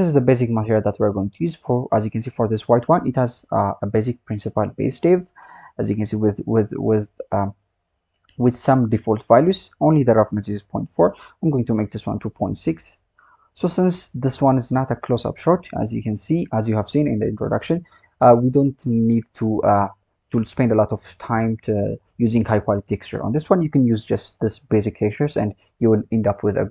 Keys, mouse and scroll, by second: 0.6 click, 1.5 click, 2.0-3.0 scroll down 3, 3.0-4.9 scroll up 5, 4.9-7.2 scroll down 3, 7.2-8.8 scroll down 3, 8.8-10.6 scroll up 1, 10.6-12.8 drag, 12.8-13.1 scroll down 2, 13.1-13.6 scroll up 3, 13.6 click, 15.6-16.2 scroll down 2, 16.2-17.6 scroll down 5, 17.6-20.3 scroll up 1, 20.3 scroll up 6, 21.1-22.4 scroll up 17, 22.4-23.0 scroll down 1, 23.0 scroll down 11, 24.9-25.3 scroll up 2, 25.3-26.7 scroll down 5.